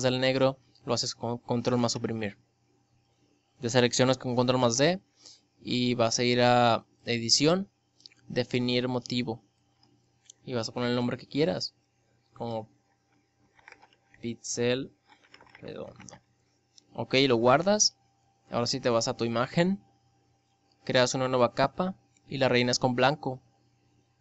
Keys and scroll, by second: 0.5 ctrl+Delete, 3.1 ctrl+d, 23.3 ctrl+Delete.